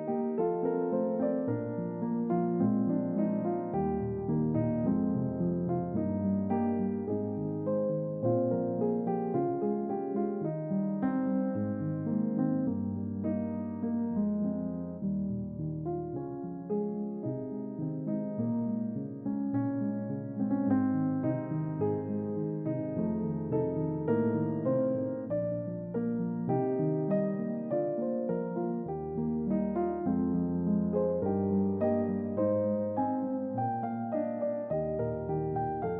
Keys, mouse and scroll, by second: 1.4 click, 3.4 click, 4.1 Tab, 8.6-11.3 drag, 12.7 click, 13.6 click, 14.7-16.3 drag, 16.9 click, 23.1 click, 25.5-27.3 drag, 27.9-30.3 drag, 32.2 n, 33.1 shift+middle click, 33.6-34.2 scroll up 3, 34.6 scroll up 2, 35.4 scroll up 2, 35.8 shift+middle click.